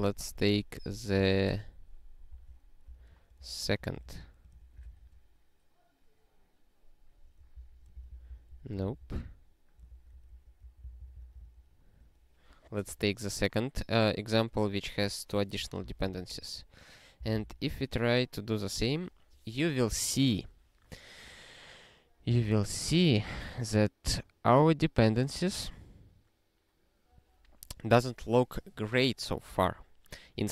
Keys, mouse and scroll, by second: 1.1 ctrl+b, 2.3 ctrl+b, 2.9 d, 3.4 alt+f, 4.0 alt+f, 4.8 ctrl+e, 7.5 alt+b, 8.1 ctrl+b, 8.3 ctrl+b, 8.5 ctrl+t, 8.8 alt+f, 9.0 alt+f, 9.2 alt+f, 9.8 ctrl+p, 10.1 ctrl+p, 10.3 ctrl+p, 10.6 ctrl+e, 10.8 ctrl+b, 11.0 ctrl+b, 11.1 ctrl+b, 11.5 ctrl+e, 15.9 ctrl+e, 17.2 ctrl+b, 17.5 ctrl+e.